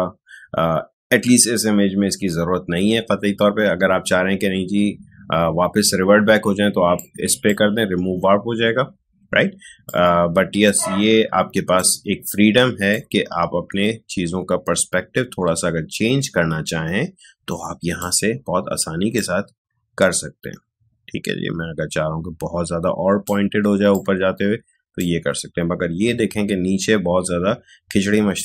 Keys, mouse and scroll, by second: 6.9-9.8 drag, 9.8-27.5 drag.